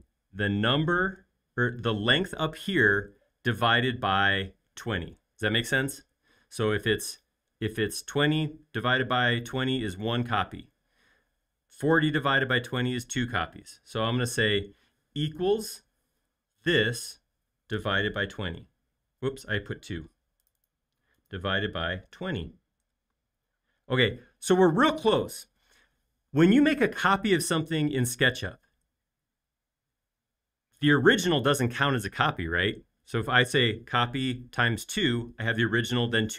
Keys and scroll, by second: 17.5-18.7 typing, 22.2 0, 22.9 Return.